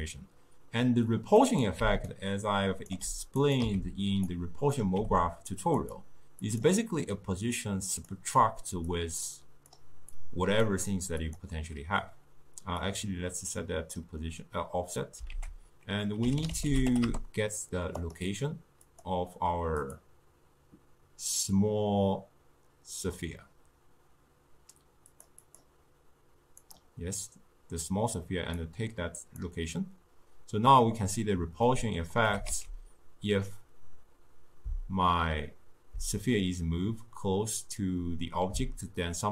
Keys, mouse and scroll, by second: 1.5 click, 1.9 d, 2.2 right click, 3.0 d, 3.1 d, 3.5 click, 3.7 x, 4.4-5.4 drag, 5.4 g, 6.5-11.4 drag, 13.0 click, 15.4 ctrl+a, 18.9 click, 25.2 click, 25.5 click, 28.6-31.7 drag, 31.7-32.4 middle drag, 32.4 g.